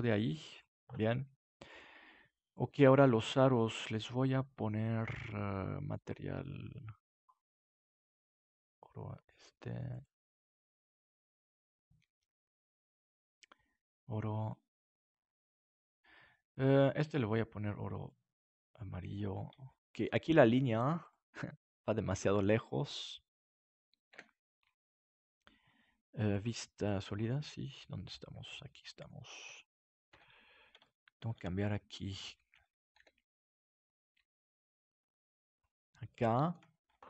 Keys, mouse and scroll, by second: 4.7-10.1 drag, 7.8-10.1 middle drag, 13.2-15.4 drag, 15.8-18.5 right drag, 17.0-19.6 drag, 19.6-23.7 middle drag, 24.1 KP_7, 26.3-28.0 drag, 27.3-29.2 middle drag, 30.1 Tab, 32.2-33.5 right drag, 32.9 g, 33.5 click, 35.5-37.0 drag, 36.8 Tab.